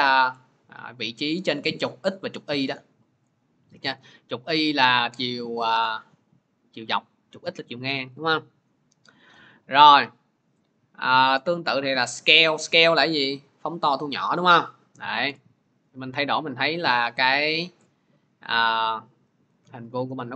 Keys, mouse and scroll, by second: 3.8-9.0 drag, 11.4-16.5 drag, 18.3-19.6 drag, 19.6 ctrl+z.